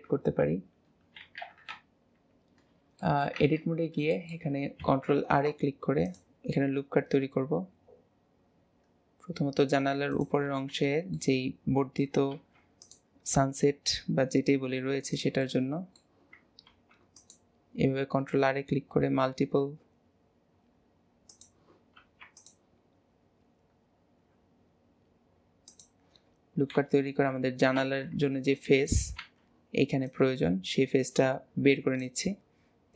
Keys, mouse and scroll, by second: 1.2 alt+z, 1.7 KP_3, 3.0-3.3 shift+middle drag, 3.3 Tab, 3.6-4.1 scroll up 2, 4.1 shift+middle click, 4.7 ctrl+r, 10.5-10.9 scroll up 4, 10.9 shift+middle click, 11.4 scroll down 1, 11.5-11.8 scroll up 1, 12.3 ctrl+r, 15.4-16.7 middle drag, 16.7 ctrl+r, 21.9 ctrl+r, 27.7 alt+z.